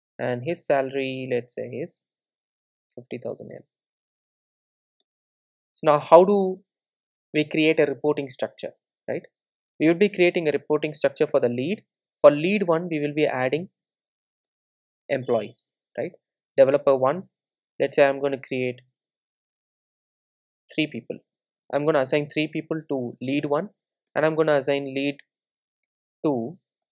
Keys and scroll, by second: 11.3 Return, 18.2 super+d, 25.2 Return.